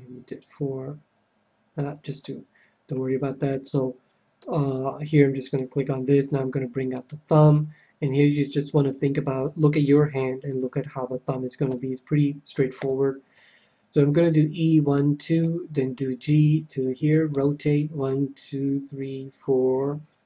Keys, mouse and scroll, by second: 3.7-5.3 middle drag, 5.5-7.2 drag, 6.8-10.6 right drag, 11.6 KP_3, 12.7 KP_7, 14.2 e, 15.4-18.5 drag, 15.9 g, 17.3 r.